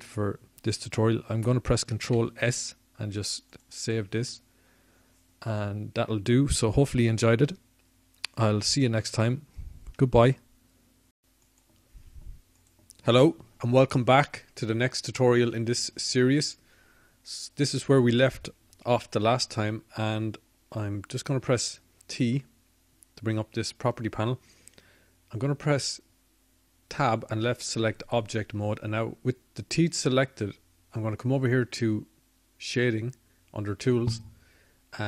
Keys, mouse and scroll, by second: 1.3 t, 7.5 ctrl+s, 10.8-12.2 drag, 27.0 t, 33.0 Tab.